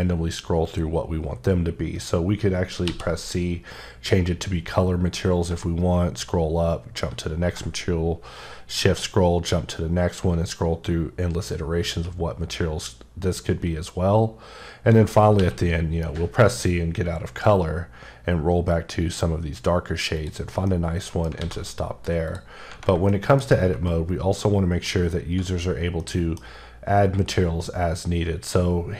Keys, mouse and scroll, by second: 0.5-1.0 scroll up 2, 1.6-2.8 scroll up 3, 3.1-4.1 scroll up 6, 4.6 scroll up 2, 5.7-6.9 shift+scroll up 6, 7.8-8.5 shift+scroll up 2, 8.6 shift+scroll, 8.6-9.0 shift+scroll down 2, 9.1-10.9 scroll up 9, 11.4 scroll up 1, 12.7 scroll up 1, 13.5 scroll up 1, 14.2-15.4 scroll up 1, 15.4 c, 15.7-16.3 scroll up 6, 17.2-17.5 scroll up 4, 18.4-19.0 scroll up 1, 19.0-19.6 scroll up 2, 20.2 click, 20.7 middle click, 21.4 alt+a, 22.3 click, 23.1 shift+middle click, 24.4 middle click, 25.0 scroll up 1, 26.0 middle click, 27.7-28.9 scroll up 1.